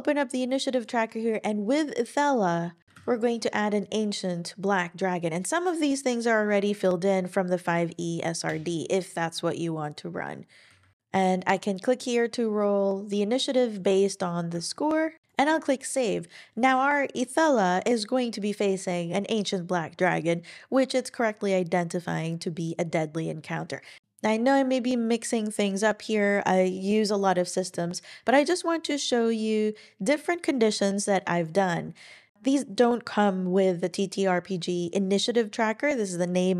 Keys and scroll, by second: 2.8 typing, 4.9 typing, 8.4 Return.